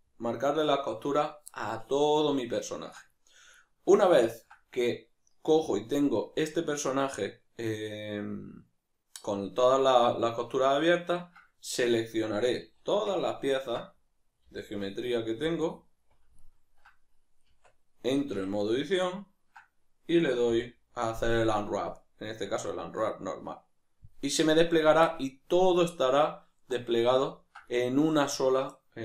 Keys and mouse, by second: 14.5 b, 17.5 Tab, 20.5 u.